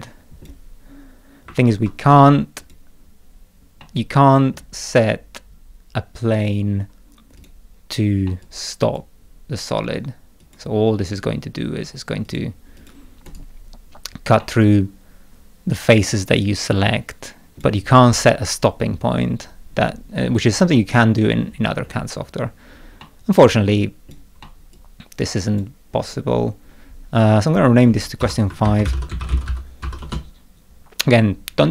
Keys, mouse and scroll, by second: 2.6 click, 3.8 middle click, 4.0 click, 7.4 click, 8.2 middle click, 8.4 click, 10.4 click, 11.1 click, 12.2 click, 12.7 click, 13.2 right click, 14.4-17.6 middle drag, 14.6-17.6 drag, 20.4 click, 21.4-22.0 scroll down 4, 23.0 middle click, 23.3 click, 23.3-23.9 scroll down 2, 23.9 middle click, 24.4-25.5 middle drag, 24.7 click, 27.4 click, 28.2 F2, 28.4-30.3 typing.